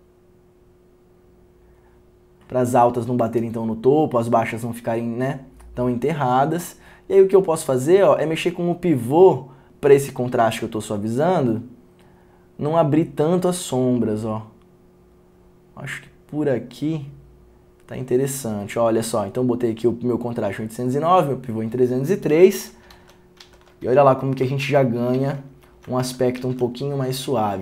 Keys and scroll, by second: 23.1 ctrl+d, 23.5 ctrl+d, 24.7 ctrl+d, 26.1 ctrl+d.